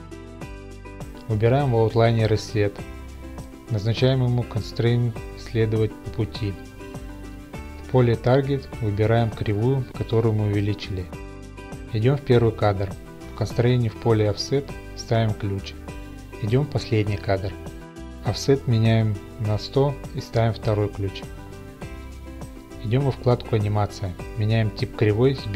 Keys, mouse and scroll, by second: 2.2 click, 5.2 right click, 5.5 click, 6.8 click, 7.6 click, 11.5 click, 13.6 right click, 15.1 click, 18.8 Right, 18.8 click, 19.4 typing, 20.2 Return, 21.4 right click, 22.1 click, 22.1 typing, 23.0 click, 23.6 click, 24.8 click.